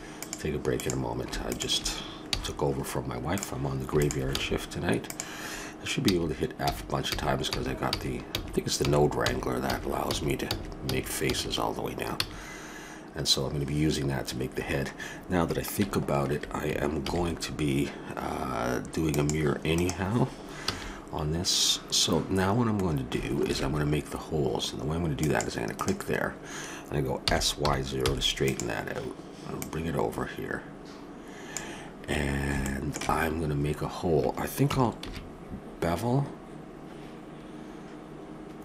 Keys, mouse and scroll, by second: 0.7-2.6 right drag, 2.2 f, 2.6 click, 4.3 f, 6.0-12.1 typing, 17.0 ctrl+r, 20.6 a, 22.7-24.5 middle drag, 23.5 ctrl+r, 27.2 s, 29.5-31.3 drag, 32.1-34.3 middle drag, 35.0 ctrl+b.